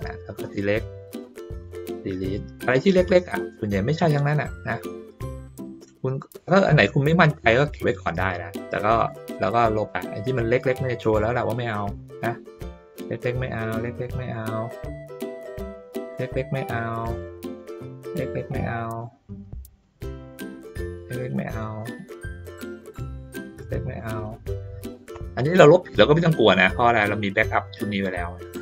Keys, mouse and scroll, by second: 0.3-1.6 drag, 2.6 click, 4.8 middle click, 5.6 click, 8.2 middle click, 9.0 click, 10.8 middle click, 11.7 click, 12.9 click, 14.0 middle click, 14.7-16.8 drag, 17.6-19.0 drag, 19.8-20.9 drag, 21.5 middle click, 22.6-24.0 drag, 24.9 middle click, 26.2 ctrl+middle click, 26.6 ctrl+middle click.